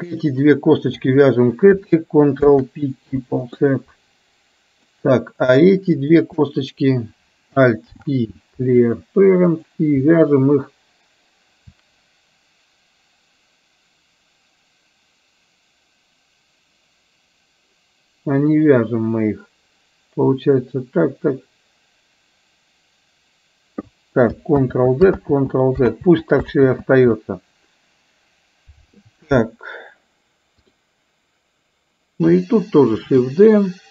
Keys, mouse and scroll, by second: 0.2 shift+click, 3.1 ctrl+p, 4.9 click, 6.0 shift+click, 7.9 alt+p, 24.8 ctrl+z, 25.4 ctrl+z, 26.2 ctrl+z, 26.5 ctrl+z, 33.0 shift+d.